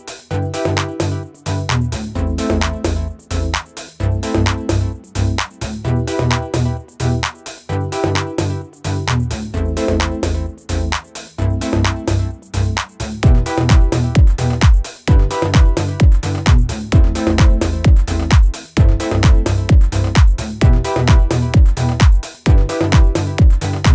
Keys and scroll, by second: 2.7 ctrl+-, 2.8 ctrl+-, 18.0 ctrl+=, 18.1 ctrl+=.